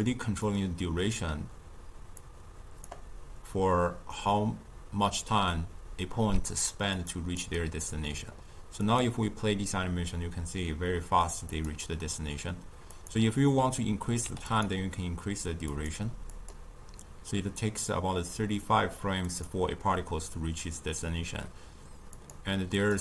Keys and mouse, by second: 0.0-5.2 drag, 6.2-8.2 typing, 6.6 click, 7.0 click, 7.6 right click, 8.8-14.6 drag, 15.7-23.0 drag.